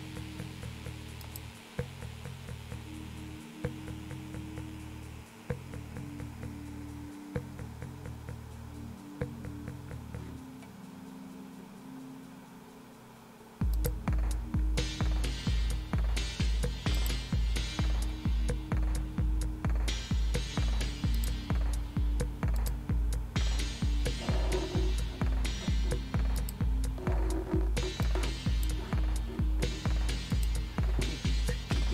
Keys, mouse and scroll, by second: 1.2 click, 11.6 scroll down 2, 13.7 click, 17.0 click, 18.9-21.2 scroll down 3, 21.2 click, 22.6 click, 26.4 click, 28.0 click, 30.3 click.